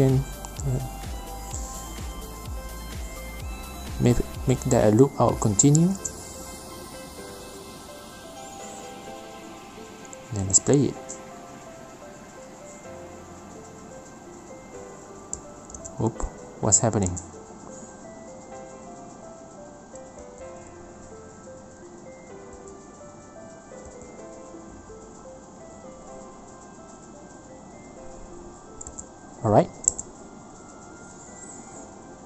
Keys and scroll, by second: 1.6 Right, 2.0 Return, 2.5-4.2 typing, 3.7 Down, 3.9 Return, 5.1 Return, 11.1 F9, 13.2 space, 15.5 space, 27.1 space, 28.8 space.